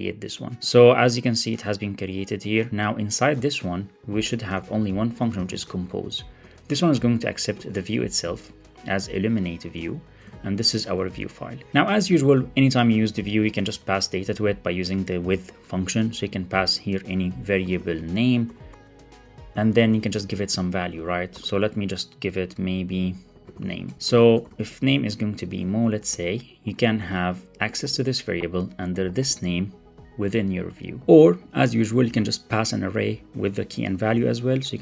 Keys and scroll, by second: 3.2 Tab, 4.4 Tab, 6.3 Tab, 9.7 Return, 10.9 Return, 11.5 alt+shift+Left, 11.7 alt+shift+Right, 12.0 super+c, 12.8 super+v, 15.1 Return, 19.8 Right, 23.8 alt+shift+Left, 23.9 Up, 24.1 super+v, 25.6 super+Right, 26.8 super+Right, 31.3 Right, 32.4 Right, 33.1 Left, 33.4 shift+super+Right.